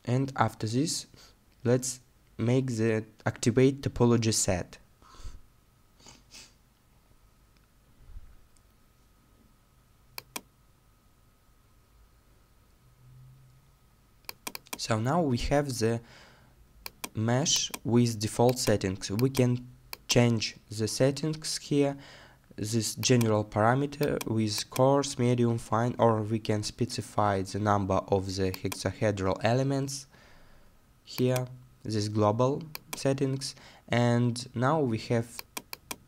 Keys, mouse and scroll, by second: 13.7-15.7 scroll down 1.